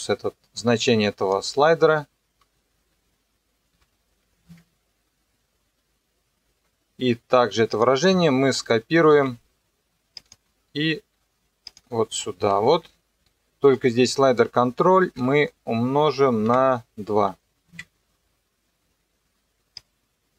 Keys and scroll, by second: 3.7 shift+0, 4.5 KP_Enter, 9.1 ctrl+c, 12.5 ctrl+v, 15.2 Left, 16.5 KP_Multiply, 17.2 KP_2, 17.7 KP_Enter.